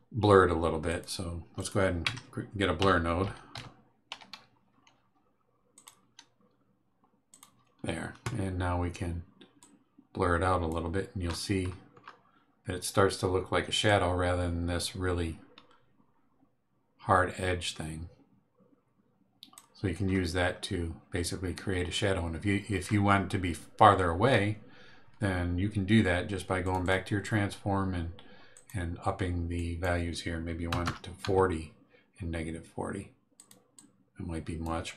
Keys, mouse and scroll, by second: 0.8 click, 1.5 click, 2.0 Tab, 2.5-4.1 typing, 5.7 click, 7.3 click, 9.6-10.8 drag, 11.2-12.2 scroll up 6, 13.8-19.7 drag, 20.0-20.7 scroll down 3, 22.8 scroll up 2, 26.6 click, 28.5 click, 29.5 click, 30.7 KP_4, 30.8 KP_0, 31.2 KP_Enter, 33.3 click, 33.7-34.8 drag.